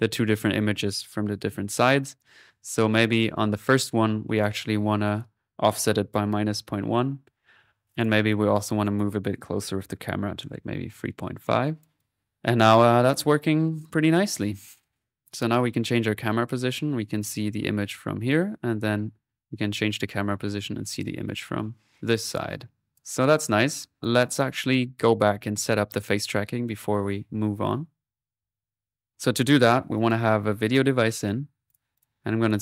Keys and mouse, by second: 2.9-5.9 drag, 7.7-8.7 drag, 8.8-10.5 drag, 11.4-15.0 drag, 15.1-22.9 drag, 23.4 middle click, 24.0 click, 25.7 click, 27.3-28.7 middle drag, 28.5-31.0 typing, 29.1-30.5 drag, 31.7 click, 32.0-32.6 typing, 32.4 click.